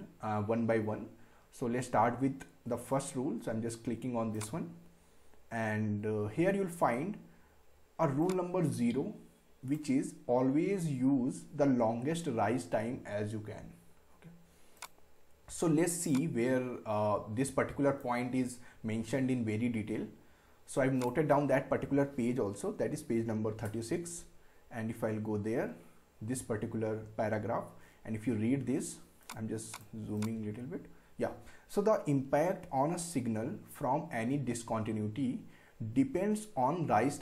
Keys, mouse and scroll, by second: 4.3 click, 5.3 scroll down 1, 8.2-12.1 drag, 14.8-20.5 drag, 21.0 click, 24.7-25.2 scroll down 2, 28.1 scroll down 2, 29.2 click.